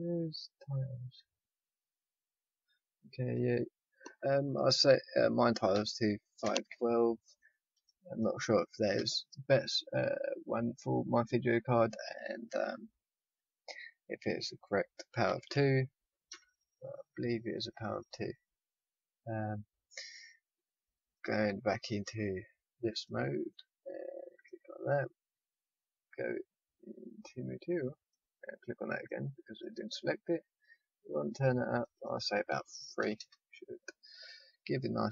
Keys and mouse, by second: 11.1-17.8 drag, 21.1-22.8 drag, 23.5 middle click, 24.4-29.8 drag, 29.1 middle click, 29.1 right click, 30.8-34.0 drag, 30.8-32.8 right drag, 34.6 middle click, 34.8 middle click.